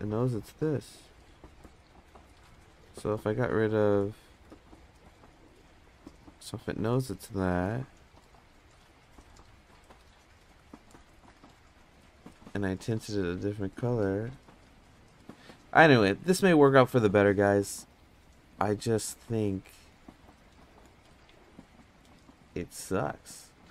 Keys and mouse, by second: 0.0 click, 0.2 click, 0.4 click, 0.6 click, 1.2 click, 1.4 click, 2.0 click, 3.0 click, 5.8 click, 6.0 click, 6.1 click, 6.3 click, 6.5 click, 6.6 click, 6.8 click, 7.0 click, 7.8 click, 11.1 click, 12.4 drag, 13.7-15.2 drag, 16.1 ctrl+z, 19.1-20.6 drag.